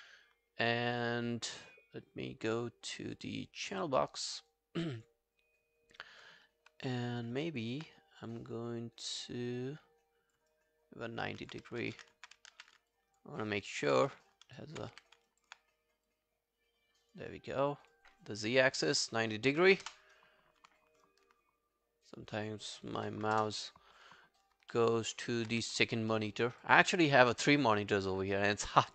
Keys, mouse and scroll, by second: 4.8 double click, 5.0 double click, 7.3 click, 7.4 alt+click, 10.5 alt+click, 11.4 alt+click, 11.8 ctrl+z, 12.5 ctrl+z, 12.9 alt+click, 13.4 alt+right click, 13.7 alt+click, 14.0 w, 14.3 alt+click, 14.9 e, 15.3 alt+click, 19.5-20.2 typing, 22.8-23.7 typing, 24.7 alt+middle click, 25.0 alt+right click, 25.3 alt+click, 25.5 w, 26.2 alt+middle click, 26.4 alt+scroll down 1, 26.6 alt+click, 28.8 alt+middle click.